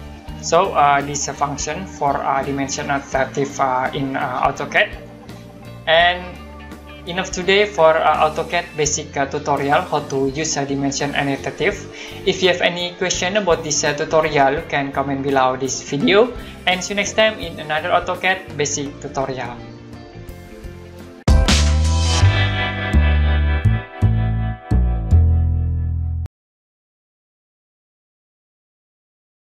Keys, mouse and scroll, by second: 1.2 click.